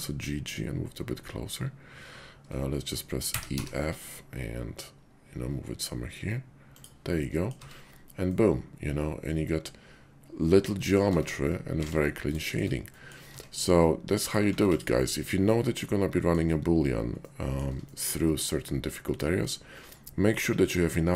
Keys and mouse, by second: 3.2 e, 3.5 f, 6.6 click, 7.1 middle click, 7.6 Tab, 8.2-11.0 middle drag, 11.1 Tab, 11.7 alt+x, 12.4 shift+click, 12.9 click, 13.3 Tab, 14.5 x, 15.2-16.4 drag, 17.2 click, 17.8 shift+click, 19.2 middle click.